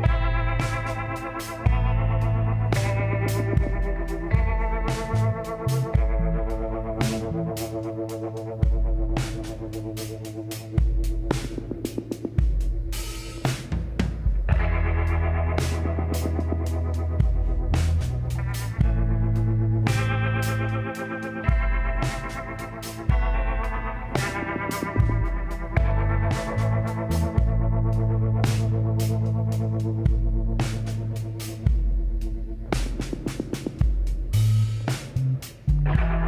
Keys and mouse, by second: 6.1-7.9 middle drag, 12.3 alt+h, 13.2-15.0 drag, 17.4-20.3 drag, 19.2 l, 21.1 s, 25.2-27.1 middle drag, 27.8 KP_7, 29.5-30.8 drag, 31.0 middle click, 33.6-35.4 drag.